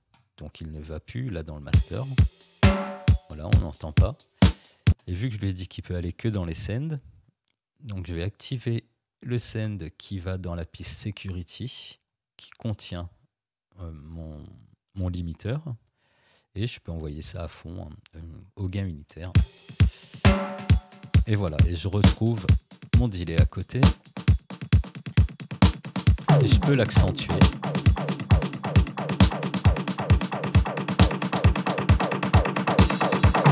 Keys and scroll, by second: 1.7 space, 4.9 space, 19.3 space.